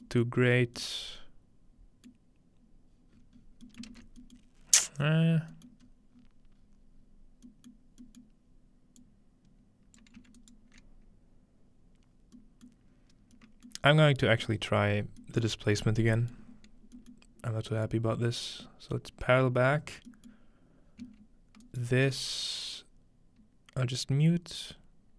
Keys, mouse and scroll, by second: 0.0 middle click, 0.2 middle click, 0.5 scroll up 1, 2.1-3.8 middle drag, 2.1-2.4 scroll up 1, 3.1-4.5 scroll down 2, 3.9 ctrl+space, 3.9-4.2 ctrl+middle drag, 4.5 scroll up 1, 4.6-5.1 scroll down 1, 5.1-6.6 scroll up 2, 6.6-7.1 scroll down 2, 8.0-10.0 middle drag, 8.0-8.9 scroll down 1, 10.0-12.0 ctrl+alt+drag, 10.4-12.0 ctrl+alt+right drag, 12.7-13.3 middle drag, 13.7-14.2 middle drag, 14.5 middle click, 15.5-16.1 middle drag, 15.9-17.7 scroll up 1, 16.3-16.9 middle drag, 17.1-23.4 middle drag, 21.6-23.0 ctrl+alt+right drag, 24.1-25.1 scroll down 2.